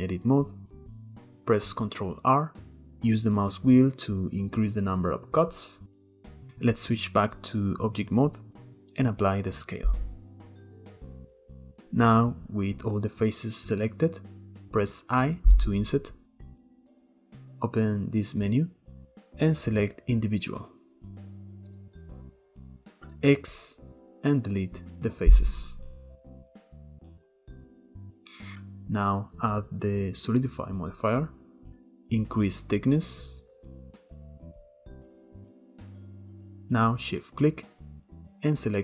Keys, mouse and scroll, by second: 0.3-2.0 shift+middle drag, 2.0 ctrl+r, 4.5-4.8 shift+middle drag, 4.8-5.9 scroll up 1, 5.9 click, 6.3 shift+middle click, 6.4 ctrl+z, 7.0 Tab, 9.1 ctrl+a, 11.0 Tab, 12.6 a, 15.3 i, 17.9-21.1 drag, 23.7 x, 25.9-26.5 middle drag, 26.5-26.8 scroll up 1, 26.8 middle click, 27.2 scroll up 1, 27.5-29.3 shift+middle drag, 29.3 click, 30.3-33.3 drag, 33.3-33.6 scroll down 1, 33.6 Tab, 34.2-34.7 middle drag, 34.7 click, 35.1 shift+middle click, 35.2 scroll up 1, 35.3 Tab, 35.7 middle click, 36.3 click, 37.7 shift+click, 38.3 shift+click.